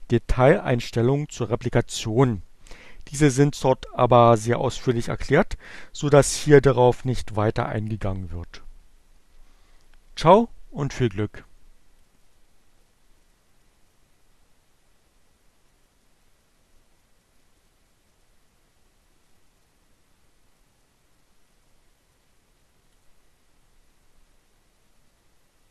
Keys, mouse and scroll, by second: 10.7-22.6 drag.